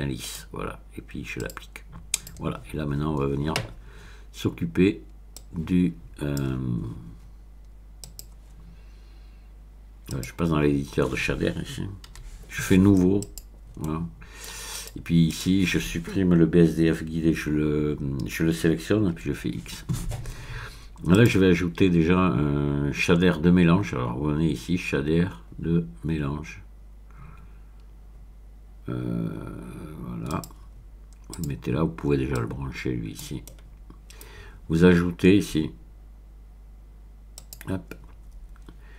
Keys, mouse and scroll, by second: 0.2 click, 1.4 click, 2.1 click, 5.4-6.7 drag, 8.0 click, 10.1 click, 12.1 n, 13.2 click, 13.8 middle click, 14.7 click, 15.3 click, 19.2 x, 21.1 click, 30.3 click, 31.3 click, 32.3-33.5 drag, 33.5-34.6 middle drag, 33.5-34.5 scroll up 1, 34.5 scroll up 1, 37.4 click.